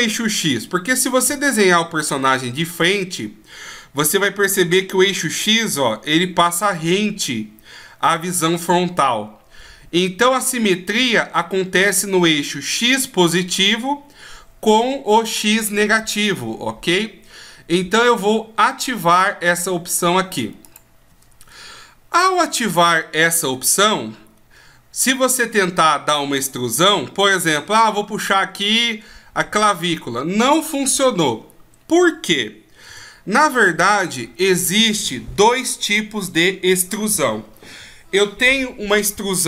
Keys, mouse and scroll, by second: 1.2 KP_1, 20.6 click, 23.9 KP_5, 28.3 e, 32.9 ctrl+z.